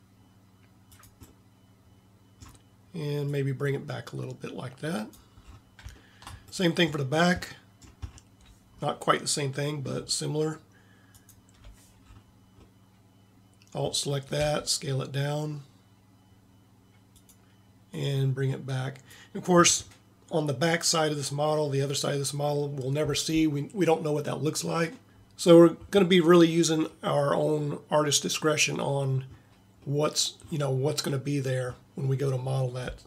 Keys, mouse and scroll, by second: 12.1-13.1 middle drag, 14.5 s, 28.2-30.0 middle drag, 30.1-33.0 middle drag.